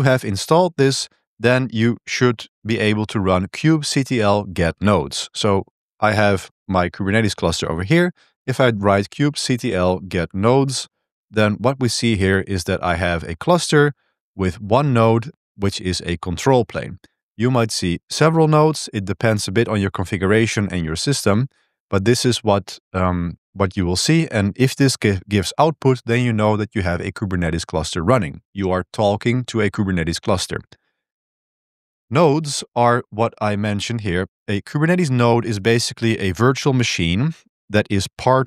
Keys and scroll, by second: 0.0-1.2 typing, 4.6 ctrl+b, 4.8 2, 7.9-11.2 typing, 23.0 typing, 31.9 super+3, 32.6 super+1.